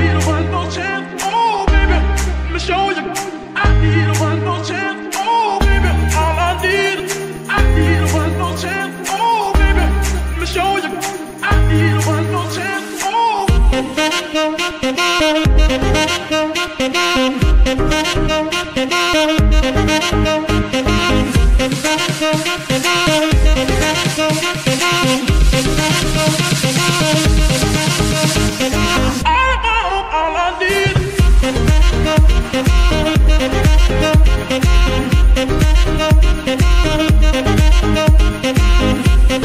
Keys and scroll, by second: 7.5 KP_3, 8.2 g, 8.3 y, 10.3 g, 10.4 y, 17.2 KP_0, 17.4 KP_Enter, 22.8 shift+a, 29.2-29.8 typing, 30.4 Return, 37.2 KP_3, 38.0 g, 38.1 y.